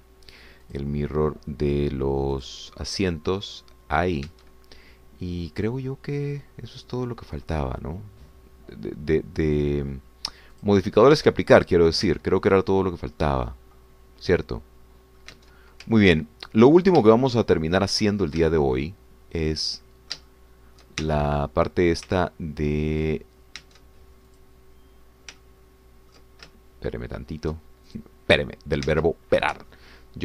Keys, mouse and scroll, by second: 0.3 click, 1.7 click, 3.3 click, 4.0 click, 5.3 Tab, 5.8-6.3 scroll down 1, 6.6-10.6 middle drag, 10.9 scroll up 1, 11.5 click, 12.2 Tab, 12.6 click, 13.1 Tab, 14.2-16.8 middle drag, 16.4 Tab, 17.1-18.1 ctrl+drag, 18.4-22.0 shift+drag, 22.1 shift+Tab, 23.1 ctrl+middle click, 25.0 Tab, 25.3 click, 26.4 ctrl+middle click, 27.5-28.7 ctrl+shift+middle drag, 28.9 shift+click, 30.0 Tab.